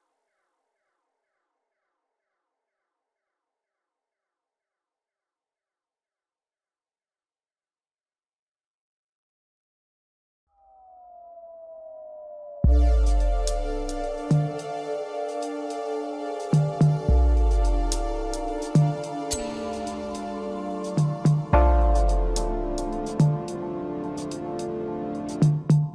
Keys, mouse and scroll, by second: 6.8-7.9 middle drag, 7.9 scroll up 2, 8.1-9.5 middle drag, 9.5 KP_7, 12.1 e, 14.7 s, 18.2 s, 21.3 e.